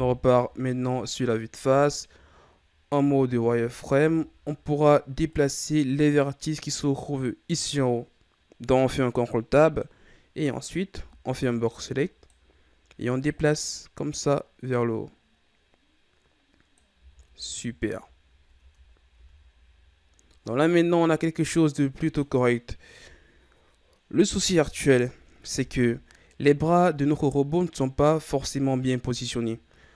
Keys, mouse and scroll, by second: 1.1-1.9 ctrl+scroll up 5, 2.0-3.0 shift+scroll up 1, 3.0 z, 3.9 ctrl+Tab, 10.4 right click, 10.8 b, 13.2-16.2 drag, 16.9 z, 17.6-18.5 ctrl+scroll down 3, 18.5 Tab, 19.1 a, 19.4-20.4 scroll down 4, 20.4-22.9 middle drag, 22.9 KP_1, 26.1-27.4 scroll up 2, 27.4-29.5 ctrl+scroll down 3, 29.6-29.9 ctrl+scroll up 8.